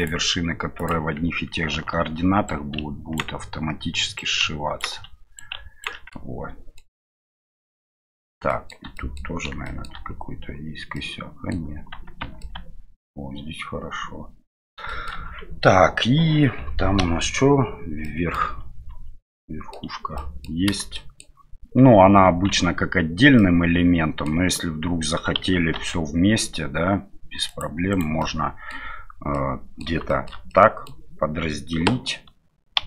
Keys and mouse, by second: 0.1-1.1 drag, 2.5-3.7 right drag, 4.2 right click, 5.4 ctrl+right click, 6.2 middle click, 7.8 middle click, 9.0 middle click, 9.7 shift+middle click, 11.0 middle click, 12.2 Tab, 12.4-14.6 middle drag, 14.8 shift+middle drag, 17.0 KP_Divide, 18.0 middle click, 18.9 KP_Divide, 19.2-19.7 middle drag, 20.1 KP_Divide, 20.1 middle click, 20.9-21.2 shift+middle drag, 22.5 Tab, 23.3 middle click, 25.7 ctrl+r, 28.3 middle click, 29.4 middle click, 30.1 shift+middle click, 30.5 middle click.